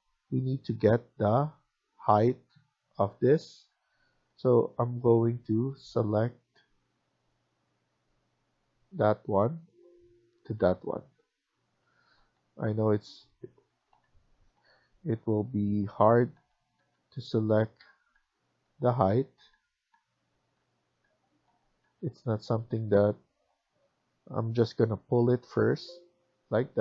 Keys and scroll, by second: 3.5 Tab, 4.2 Tab, 10.5 Escape, 10.7 Escape, 12.0 ctrl+z, 12.7 Escape, 12.9 Escape, 14.1 typing, 15.9 Tab, 16.0 typing, 16.3 Tab, 16.7-21.7 Tab, 22.6 Escape, 22.9 Escape, 26.2 Escape, 26.5 Escape.